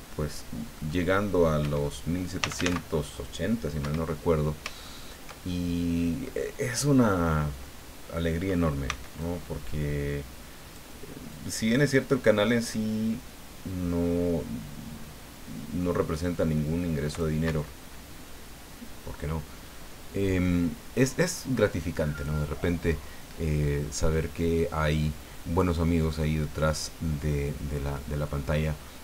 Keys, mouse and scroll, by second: 0.8 middle click, 1.6 Escape, 2.4 f, 2.5 a, 2.6 c, 3.8 Escape, 4.1-4.7 scroll down 2, 4.8-6.4 shift+middle drag, 6.5 scroll up 1, 8.8 c, 9.2-10.9 drag, 11.3-17.3 drag, 17.4 Escape.